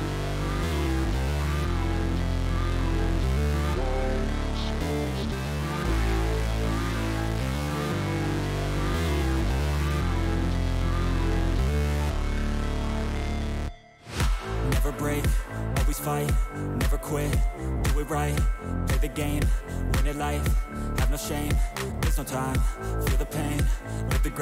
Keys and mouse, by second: 0.0-1.1 drag, 1.6 click, 2.1 shift+click, 2.7 click, 4.5 shift+click, 6.5-7.8 drag, 11.2-12.3 drag, 13.1 click, 13.8 click, 16.4-17.6 drag, 20.8-22.1 drag.